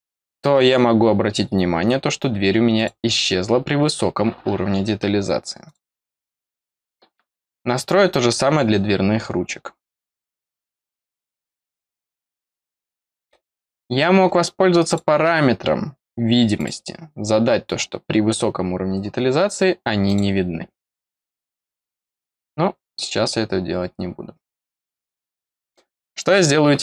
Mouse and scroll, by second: 2.7 click, 5.6 click, 6.3 click, 11.1 click, 12.7 click, 14.8 click, 20.0 click, 21.1 click, 22.8 click, 24.5 click, 25.7 middle click.